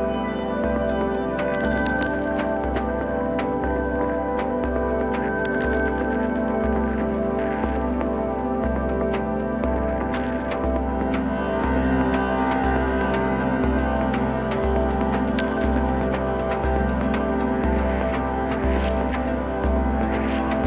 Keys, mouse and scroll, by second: 1.6 ctrl+b, 7.0-7.4 scroll down 2, 7.4-10.4 middle drag, 10.4 3, 10.9 click, 11.8 KP_7, 12.9 a, 13.4-13.8 scroll down 1, 13.8 s, 16.4 click, 16.8 scroll up 2, 17.0-17.9 scroll down 1, 17.9 shift+d, 19.0 s.